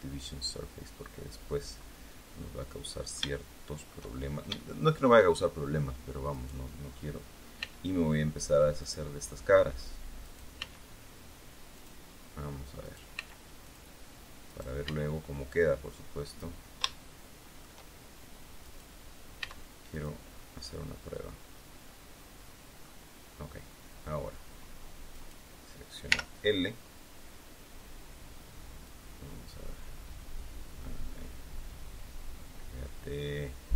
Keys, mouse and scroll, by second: 1.7 scroll up 2, 2.5-4.0 drag, 4.5 shift+click, 5.3 shift+scroll up 2, 6.2 right click, 7.5 x, 8.7 right click, 10.2 right click, 10.5 x, 11.7 click, 12.7 right click, 13.1 x, 13.6 click, 14.4 right click, 14.7 x, 16.2 click, 16.8 shift+middle click, 18.5 right click, 19.3 x, 19.8 click, 20.2 scroll down 1, 20.5-22.9 drag, 25.0 right click, 26.0 l, 28.8-33.7 drag.